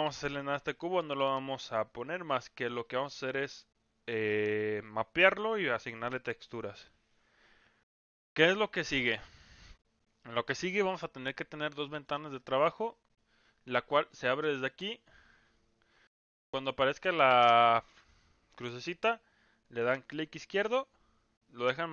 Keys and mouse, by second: 0.4 middle drag, 2.0 middle drag, 2.8-5.2 middle drag, 8.5-10.8 drag, 11.7-12.0 middle drag, 20.4-21.9 drag.